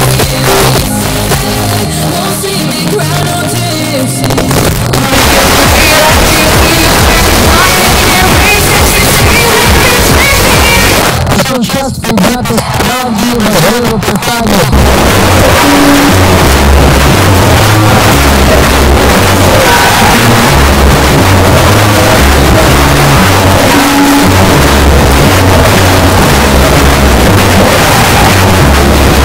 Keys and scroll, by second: 11.0 Page_Down.